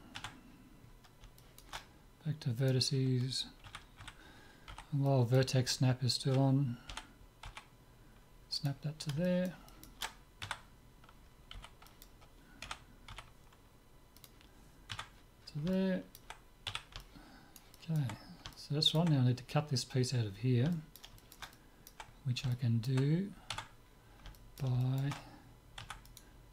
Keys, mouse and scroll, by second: 0.2 Tab, 1.2 middle click, 2.6-4.2 drag, 3.6 a, 4.1 a, 4.8 b, 6.9 g, 9.3-11.4 middle drag, 10.4 a, 11.6 b, 12.8 g, 14.9 Tab, 15.1-16.2 middle drag, 16.7 z, 20.4 middle click, 23.5 Tab, 25.8 Tab, 26.2-26.5 right drag.